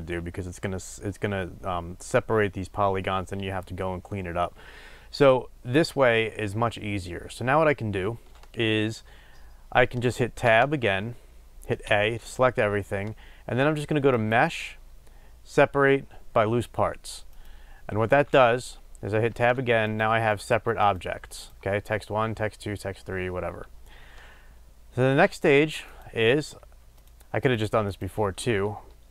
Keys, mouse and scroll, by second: 10.4 Tab, 11.8 a, 17.4-19.9 drag, 19.2 Tab, 27.0 shift+click.